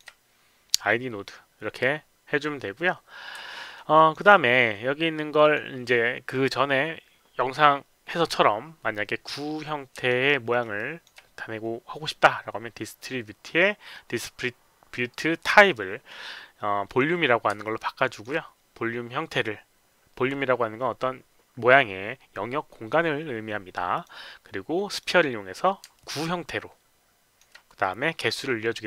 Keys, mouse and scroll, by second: 3.5 alt+middle click, 3.9 alt+click, 5.4 click, 10.0 alt+right click, 10.5 alt+middle click, 10.7 alt+click, 15.4 click, 16.8 click, 17.6 alt+click, 23.9 click, 24.8 click, 25.9-27.3 alt+drag, 28.3 click.